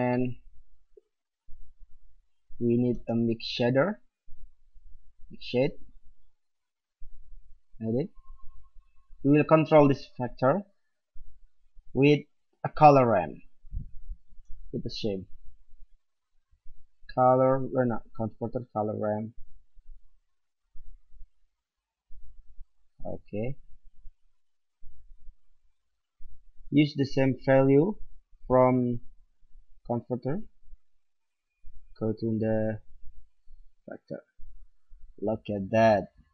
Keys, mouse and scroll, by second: 0.1-1.7 middle drag, 1.7-3.5 drag, 2.9 shift+a, 6.3-10.5 drag, 14.2 shift+a, 24.2-26.2 drag, 27.0-31.2 drag, 31.7-33.7 drag.